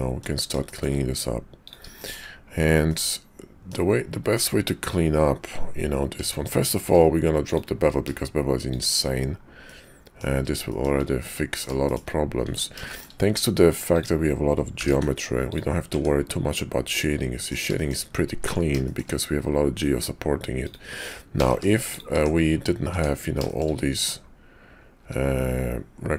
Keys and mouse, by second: 0.7 shift+middle click, 1.7 click, 2.0 shift+click, 2.9 click, 6.2 Tab, 6.8 q, 9.6 click, 10.7 shift+click, 11.3 middle click, 11.8 shift+middle click, 12.5 Tab, 12.9 shift+middle click, 13.9 click, 14.7 g, 15.9 Tab, 16.9 middle click, 17.8 shift+middle click, 18.4 Tab, 18.8 shift+click, 20.5 click, 21.3 g, 22.1 Tab, 22.8 Tab, 23.4 shift+click, 25.0 `.